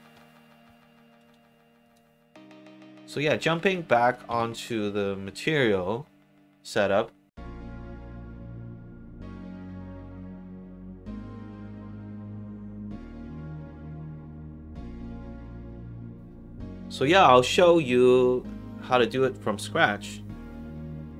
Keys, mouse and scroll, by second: 1.8 click, 3.0 middle click, 3.9 click, 4.2 1, 7.3 alt+click, 8.3 alt+click, 8.8 alt+middle click, 9.1 alt+right click, 9.4 alt+click, 9.9 alt+middle click, 10.3 alt+right click, 10.5 alt+click, 12.1 middle click, 12.7 scroll down 2, 12.9 middle click, 13.6 middle click, 14.5 middle click, 16.0 click, 20.8 middle click.